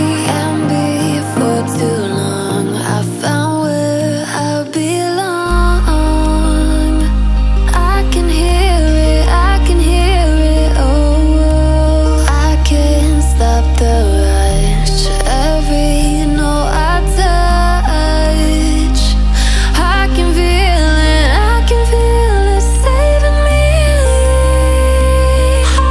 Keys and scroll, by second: 15.0 ctrl+n.